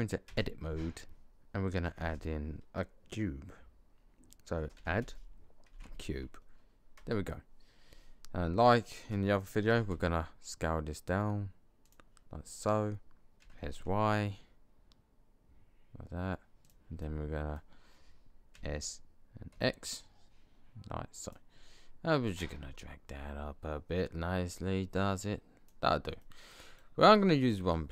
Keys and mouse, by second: 0.2 Tab, 2.5 space, 4.8 d, 9.6 s, 13.3 s, 17.0-18.4 middle drag, 18.4 click, 18.4 s, 22.4 middle click, 22.6 middle click, 23.2-24.5 drag, 26.1 click, 26.3 middle click.